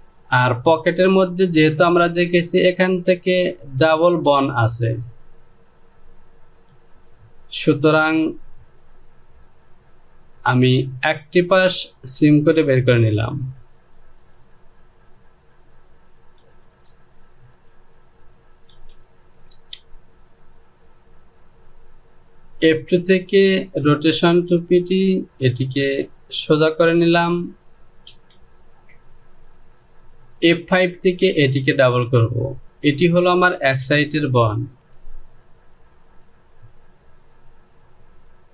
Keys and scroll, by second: 17.1 j, 19.2 Home.